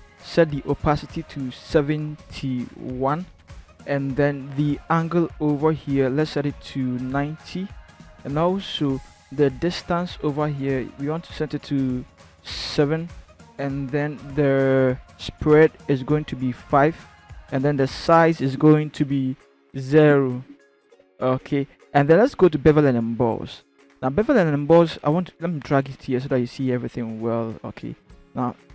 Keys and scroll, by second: 2.5 7, 3.6 1, 6.9 9, 7.0 0, 12.4 7.